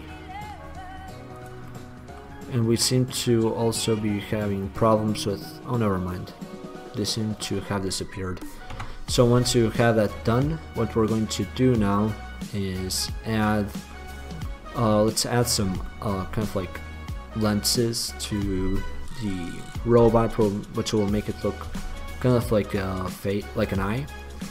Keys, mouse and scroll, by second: 1.7 click, 1.9-4.1 middle drag, 4.2 middle click, 4.4 middle click, 5.0 middle click, 5.4 middle click, 9.0 Tab, 14.7-18.0 middle drag, 21.9 Tab.